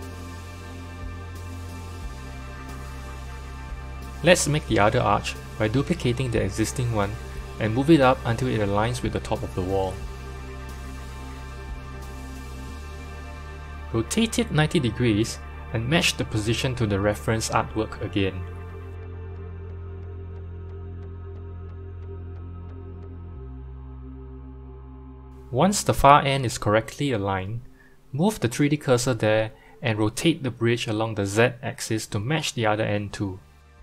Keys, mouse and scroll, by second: 0.2-1.0 middle drag, 1.0 scroll down 2, 1.7 click, 3.6 n, 4.1 click, 5.4 shift+d, 6.5 KP_1, 7.5 g, 11.9 KP_7, 12.7-13.5 scroll down 3, 13.5 r, 16.1 g, 19.8 click, 20.3 click, 21.8-23.0 scroll up 3, 23.0 g, 26.5 click, 27.0 click, 27.7 click, 29.4 shift+right click, 30.8-33.2 drag, 33.1 r.